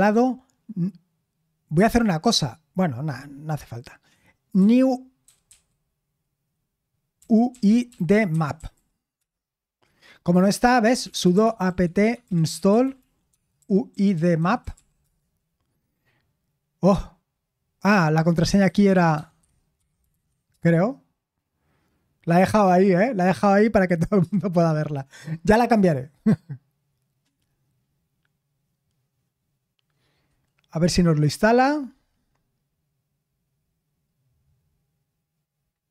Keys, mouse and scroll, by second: 4.6-9.2 typing, 10.8-15.2 typing, 18.2-20.6 typing, 24.2 Return, 33.6-34.3 scroll down 1, 34.3-35.9 scroll down 1.